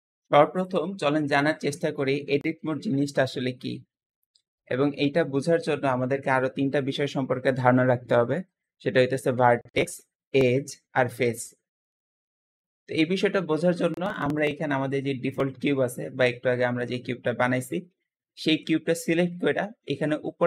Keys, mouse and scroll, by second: 14.2 click, 16.8-17.7 middle drag, 17.7-20.4 scroll down 1.